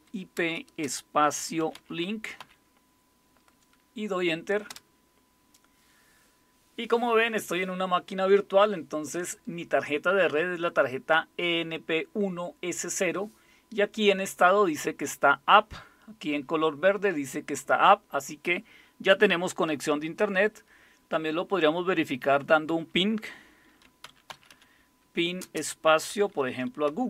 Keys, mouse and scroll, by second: 0.0-2.4 typing, 4.7 typing, 23.6-27.0 typing.